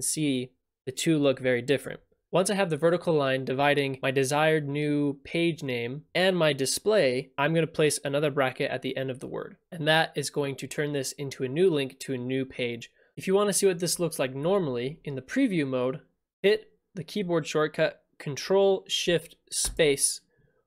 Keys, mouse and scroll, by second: 4.0 click, 6.1 click, 7.4 click, 18.5 click, 20.1 click.